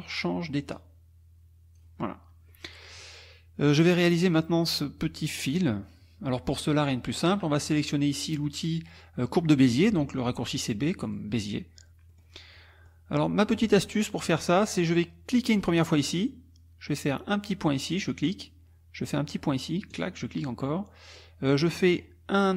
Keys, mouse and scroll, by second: 0.7-2.0 drag, 2.5 middle click, 11.0 click, 12.1 middle click, 12.5 middle click, 14.0 middle click, 14.3 click, 15.3 click, 17.9 click, 19.9 click, 21.7 middle click, 21.7-22.2 scroll up 1.